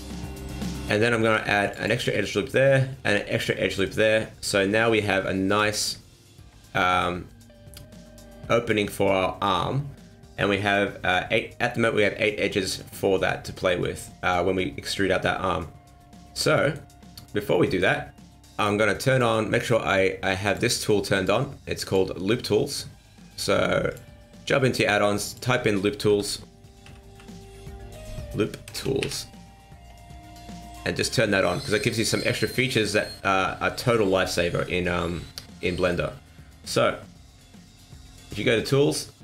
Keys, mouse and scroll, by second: 0.1 middle click, 1.3 ctrl+r, 2.1 middle click, 3.0 ctrl+r, 4.2 middle click, 5.5 click, 6.2 alt+right click, 6.6 middle click, 12.5 middle click, 15.5 middle click, 17.7 middle click, 19.1 click, 21.1 click, 32.7 middle click, 34.4 scroll down 1, 34.6 middle click, 36.0 middle click, 38.5 click.